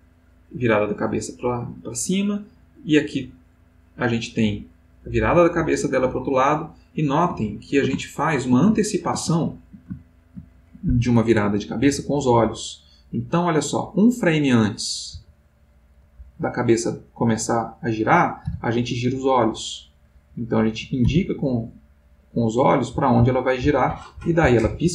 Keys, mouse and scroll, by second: 7.5-8.0 ctrl+middle drag, 8.3 ctrl+shift+middle click, 8.7-10.9 ctrl+shift+middle drag, 12.1-14.9 drag, 15.3 Right, 16.3 Left, 18.4 Right, 20.1 Left, 21.0 Right, 22.9 Right.